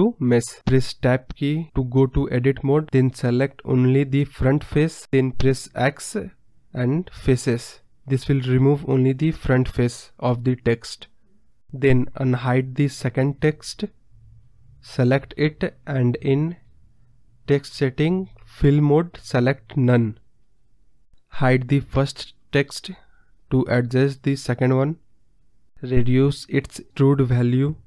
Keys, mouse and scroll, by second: 0.5 Tab, 1.4 click, 3.7 click, 5.1-6.6 middle drag, 6.7 x, 7.7-8.3 scroll up 6, 7.8 middle drag, 8.3-9.8 middle drag, 10.8 Tab, 11.1-11.7 scroll down 7, 11.2 middle drag, 11.7-12.4 middle drag, 12.4 scroll up 3, 12.5-13.0 scroll down 3, 13.0-13.9 scroll up 3, 15.0 click, 15.8 click, 18.1 click, 18.9 scroll down 1, 19.1-20.2 middle drag, 20.2-20.5 scroll down 5, 20.8-21.7 scroll up 9, 22.1-23.6 drag, 23.6-24.9 scroll up 4, 23.8-24.2 middle drag, 24.9 scroll down 1, 25.5 click, 26.1 scroll down 2, 26.3-27.8 middle drag.